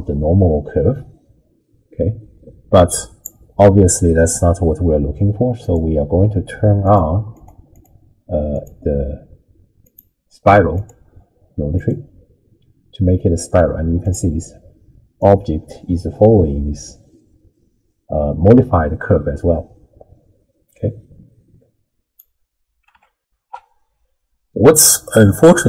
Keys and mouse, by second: 7.3 click, 7.7 click, 8.6-10.1 drag, 10.8-12.0 drag, 15.3-22.4 drag, 23.2 ctrl+alt+shift+w, 23.5 ctrl+alt+shift+q.